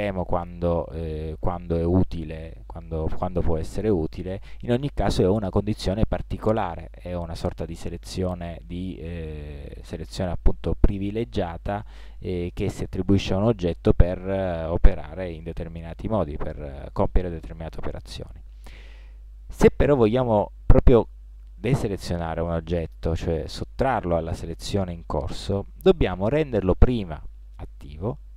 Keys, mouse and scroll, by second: 26.7 right click.